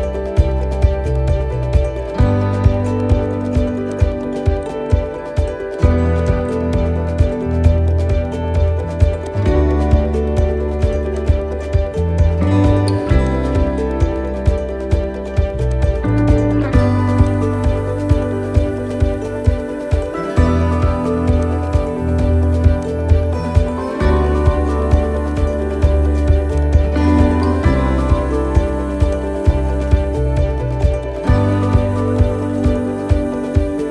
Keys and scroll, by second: 0.8 ctrl+-, 1.2 ctrl+-, 12.0 ctrl+shift+j, 18.4 ctrl+=, 18.9 ctrl+=, 23.7 ctrl+-, 24.1 ctrl+-, 24.2 ctrl+-.